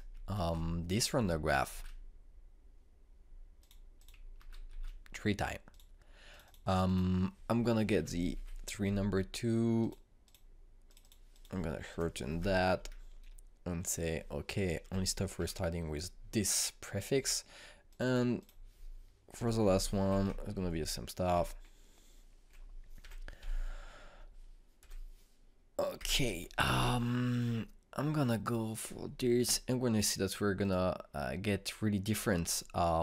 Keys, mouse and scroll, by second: 0.2 ctrl+c, 1.3 ctrl+v, 2.6 ctrl+v, 4.5 click, 5.3 ctrl+c, 5.6 ctrl+v, 6.6 click, 8.9 BackSpace, 10.7 click, 12.9 BackSpace, 14.8 click, 15.8 BackSpace, 18.1 click, 20.3 Delete, 21.5 Down, 22.3 Right, 24.0 BackSpace, 29.1-31.6 drag.